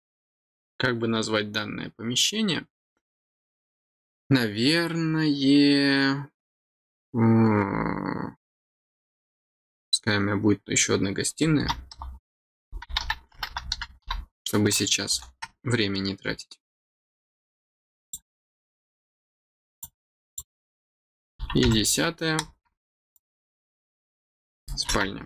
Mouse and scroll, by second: 18.0 click, 19.8 click, 23.1 click.